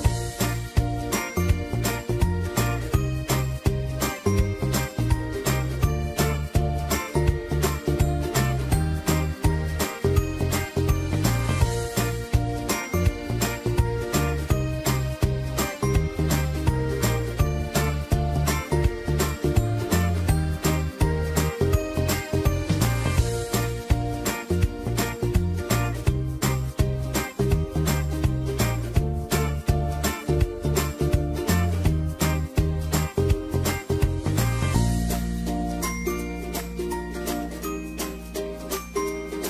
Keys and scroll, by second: 1.2 ctrl+d, 17.3-19.1 typing, 22.7 ctrl+a.